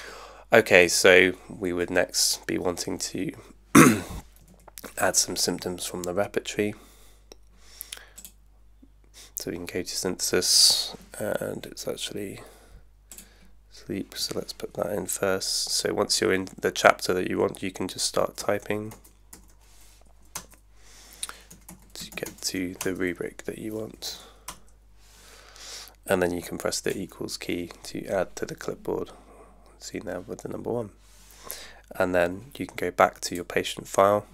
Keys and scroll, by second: 4.5 super+1, 18.0-20.0 typing, 20.3 Return, 21.3-22.8 typing, 22.8 Return, 23.9 Down, 24.5 Return, 26.9 =.